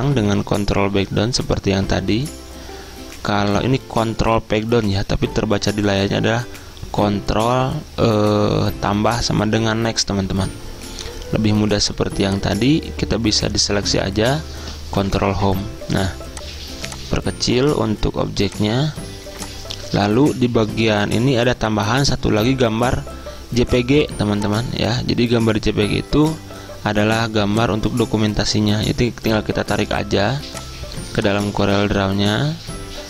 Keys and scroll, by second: 0.3 ctrl+Page_Down, 15.2 ctrl+Home.